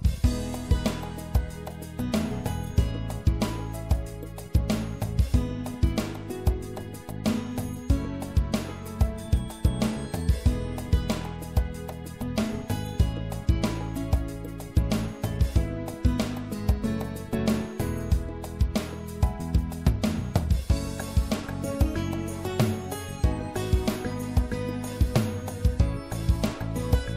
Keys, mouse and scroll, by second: 1.1 middle click, 1.6 middle click, 2.5 middle click, 5.6-11.8 middle drag, 11.8 s, 15.5-17.3 middle drag, 19.1-20.4 drag, 20.4 right click, 20.6 click, 21.1-25.8 middle drag.